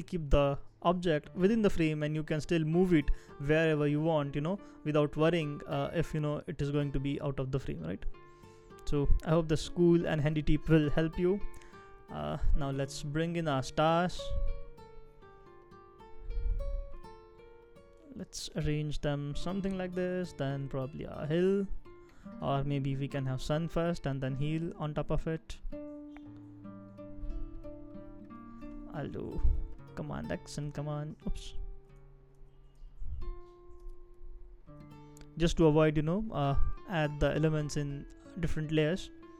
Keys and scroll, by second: 29.3 super+x, 30.6 super+c, 31.9 super+z, 32.4 super+z, 32.8 super+z, 33.8 super+x, 35.4 super+v.